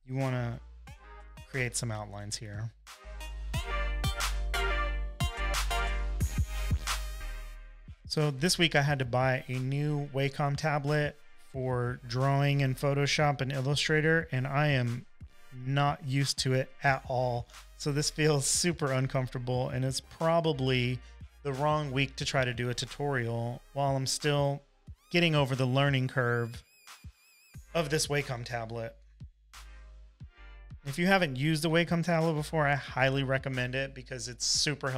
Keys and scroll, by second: 3.1 space, 3.5 space, 12.2 super+=, 12.7 space, 13.2 space, 13.3 space, 30.2 super+z, 30.4-32.9 typing.